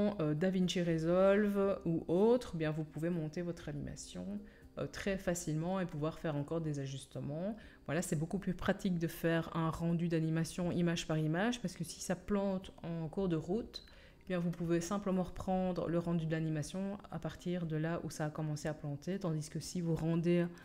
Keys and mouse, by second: 12.4-14.8 drag, 12.4-14.8 right drag.